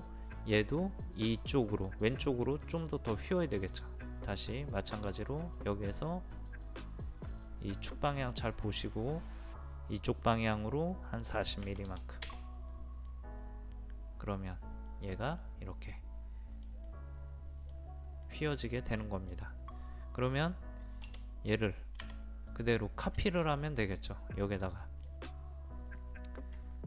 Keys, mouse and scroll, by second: 0.1-1.9 scroll up 1, 1.9 middle click, 5.0 click, 11.7 KP_4, 11.9 KP_0, 13.1-16.8 middle drag, 21.5 click, 22.0 Escape, 22.5 click, 23.2-25.8 middle drag.